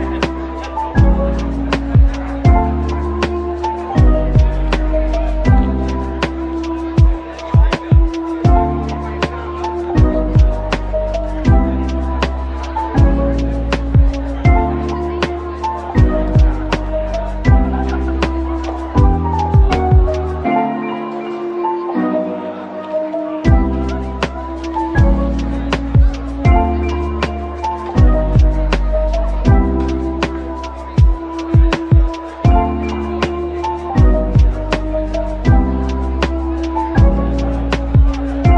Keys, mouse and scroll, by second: 1.2 typing, 5.3-6.2 typing, 9.0 shift+click, 12.0-13.0 typing, 13.7 middle click, 14.9-15.3 typing, 16.5-16.8 typing, 18.9-19.8 typing, 20.2 middle click, 23.1 shift+click, 24.0 middle click, 26.2 shift+click, 27.2 middle click, 28.7 ctrl+j, 30.1 shift+click, 31.1 ctrl+j, 31.9-32.2 scroll up 1, 32.2 middle click, 35.8-38.2 typing, 36.0 scroll down 1.